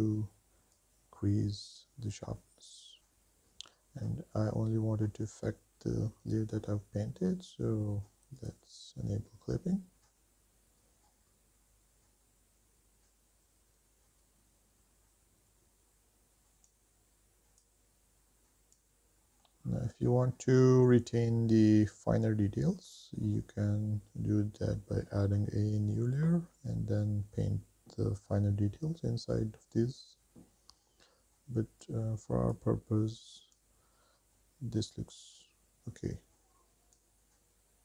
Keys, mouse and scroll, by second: 0.7-1.4 drag, 1.8 click, 2.6 click, 8.6 click, 14.9 ctrl+s, 16.1 click, 17.0 click, 18.0 scroll down 4, 18.3 middle click, 18.8 shift+middle click, 19.1 middle click, 20.5 scroll up 3, 21.6-22.6 middle drag, 32.0-33.1 drag, 34.2-35.4 drag, 37.2-37.8 drag.